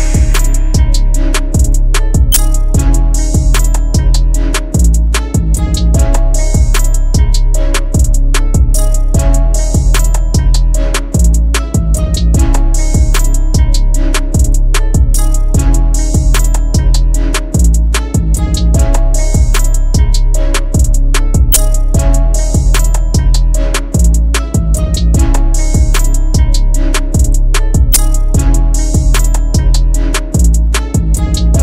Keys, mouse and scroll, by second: 0.7 ctrl+t, 1.5 alt+shift+click, 4.9 alt+s, 5.5 alt+shift+click, 8.4 Return, 13.3 ctrl+t, 15.2 alt+shift+click, 21.5 alt+shift+click.